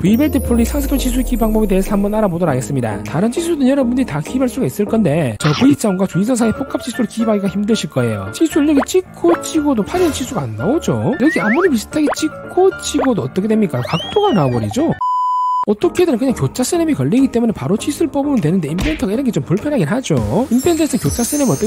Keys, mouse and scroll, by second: 9.2 click, 9.7 click, 12.6 click, 13.3 click.